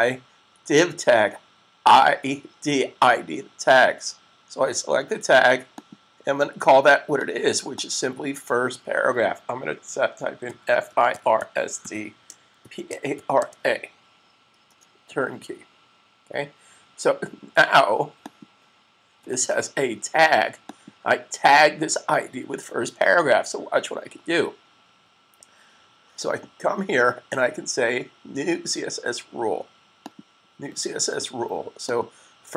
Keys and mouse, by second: 5.6 click, 10.3-11.7 typing, 12.7-13.5 typing, 16.8 typing, 18.1 click, 29.8 click.